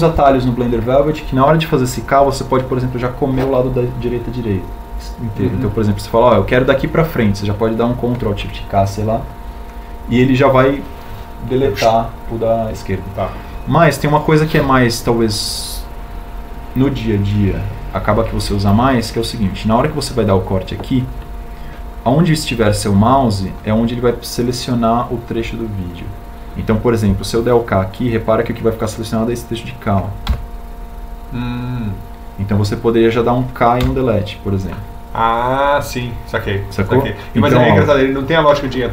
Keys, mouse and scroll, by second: 32.2 k, 35.8 Delete.